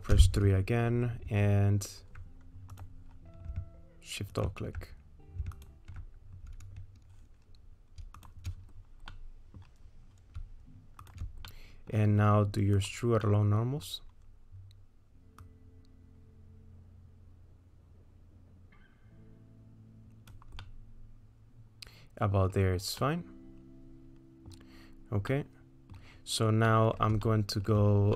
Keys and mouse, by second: 0.2 3, 3.5 3, 4.4 alt+click, 5.6 alt+click, 8.2 shift+click, 9.1 middle click, 11.5 middle click, 13.3 middle click, 15.5-20.5 drag, 20.6-22.5 middle drag, 23.1-24.5 middle drag, 26.8 middle click, 27.3 shift+middle click.